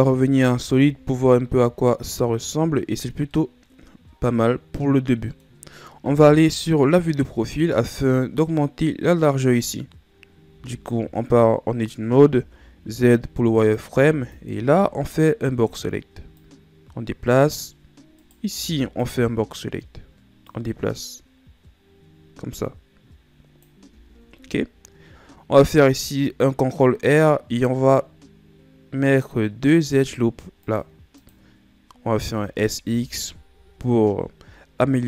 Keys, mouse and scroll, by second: 0.0 z, 0.7 Tab, 1.3-2.8 scroll down 4, 3.3-6.3 middle drag, 6.3 KP_3, 8.5-9.6 scroll down 1, 10.5 Tab, 12.4 z, 13.6 right click, 14.1 b, 16.4-18.2 drag, 18.2 right click, 18.5 b, 20.5-23.7 drag, 23.9 z, 25.6 ctrl+r, 32.3 s.